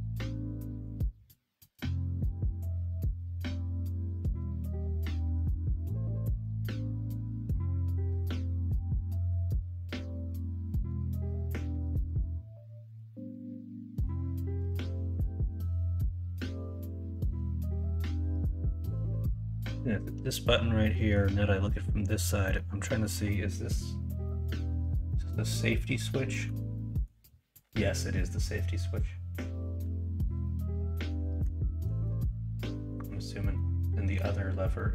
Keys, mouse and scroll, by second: 0.1 middle click, 1.6 Tab, 2.3 Tab, 4.4 middle click, 5.7 Tab, 6.1 middle click, 6.4 alt+z, 6.7 middle click, 7.2 middle click, 8.3 alt+z, 8.7-10.1 middle drag, 11.1 middle click, 12.5 3, 14.7 middle click, 15.5-20.9 drag, 20.9 middle click, 22.6 middle click.